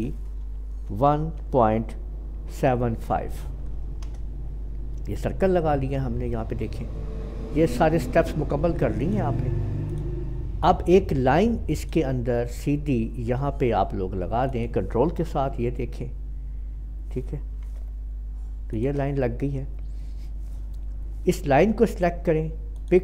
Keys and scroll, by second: 0.8-1.3 typing, 2.5-2.9 typing, 4.0 Return.